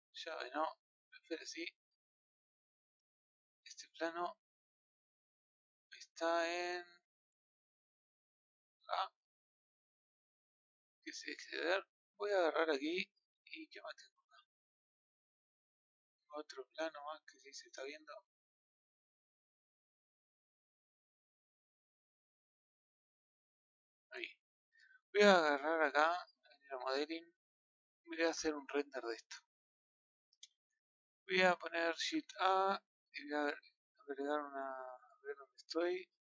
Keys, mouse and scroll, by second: 1.4-1.8 scroll down 4, 2.1-2.8 scroll up 1, 2.8-3.3 scroll up 1, 4.4 click, 10.6-11.2 drag, 11.2-11.6 scroll down 2, 11.7 middle click, 12.2 scroll up 1, 12.3-13.3 middle drag, 13.3-14.3 scroll up 7, 14.3 scroll up 1, 14.3-15.3 middle drag, 15.3 click, 15.7-16.6 scroll down 3, 16.6-17.9 middle drag, 17.9 click, 23.5 click, 24.0-27.8 middle drag, 27.8 click, 28.4-29.6 scroll down 18, 29.6-31.1 middle drag, 31.1-31.7 scroll up 3.